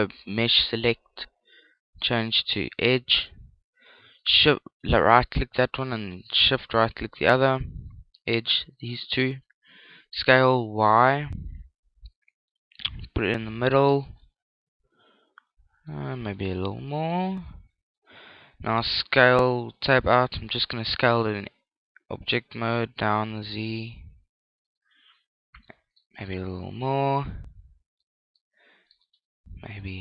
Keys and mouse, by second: 3.0 right click, 6.1 right click, 7.2-9.0 middle drag, 9.8 s, 13.9 click, 14.2-16.0 middle drag, 16.6 s, 18.3 click, 18.4 Tab, 20.8 s, 25.0 click, 27.2 s, 28.4 click, 29.1 middle click, 29.4 Tab.